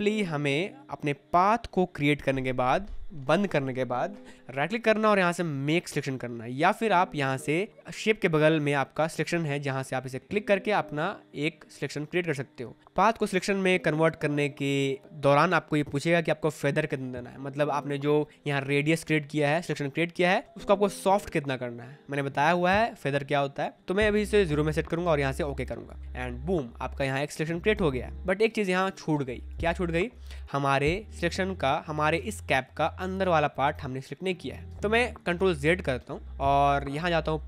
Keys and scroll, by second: 32.1 space, 35.5 ctrl+z.